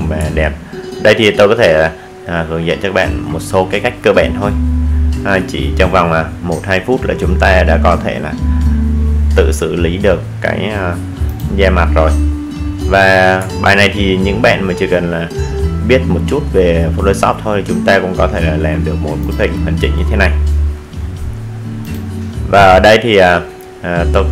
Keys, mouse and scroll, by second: 0.1-0.4 alt+scroll up 1, 9.6 click, 11.7 alt+scroll down 1, 12.5-12.8 alt+scroll up 1, 13.5-14.2 alt+scroll down 1, 14.2-14.6 alt+scroll up 1, 15.1-15.9 alt+scroll down 1, 17.1 click, 20.1 click.